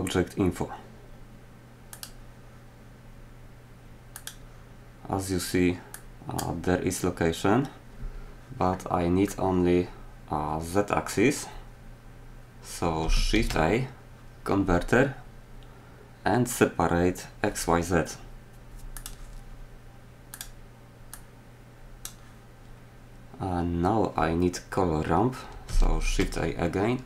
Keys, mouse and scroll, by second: 13.3 shift+a, 25.9 shift+a.